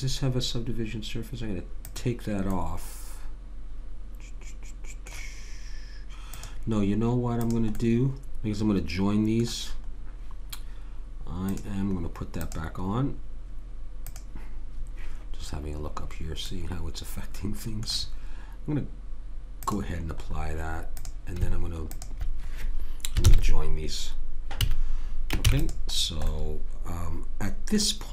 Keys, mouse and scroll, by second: 2.5 middle click, 3.6 middle click, 6.3-9.1 drag, 7.8-9.8 middle drag, 11.5-12.5 middle drag, 12.5 click, 14.0 click, 16.5-19.1 middle drag, 19.5-23.4 drag, 23.2 ctrl+j, 24.6 a, 25.4 ctrl+s, 26.0 middle click, 26.8 middle click.